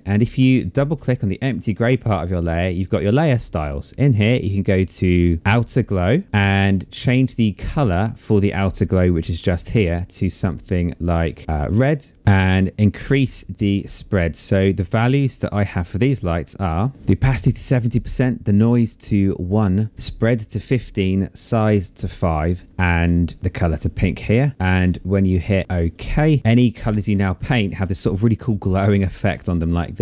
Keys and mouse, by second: 0.4 click, 1.9 click, 5.9 click, 8.8 click, 10.6 click, 25.5 click, 26.1 click, 28.6 ctrl+z.